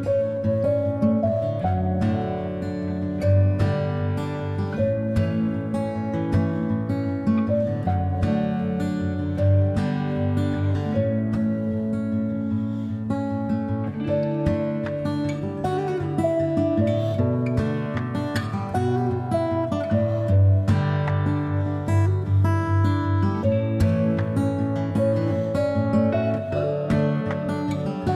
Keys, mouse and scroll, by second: 0.7-2.1 middle drag, 2.1 ctrl+click, 2.9-4.9 middle drag, 4.9-19.5 drag, 14.7 BackSpace, 19.5-20.7 middle drag, 20.7-21.6 ctrl+drag, 21.6 middle click, 22.2 click, 22.3 middle click, 22.9-23.9 ctrl+drag, 23.9-26.9 middle drag, 26.9-28.1 drag.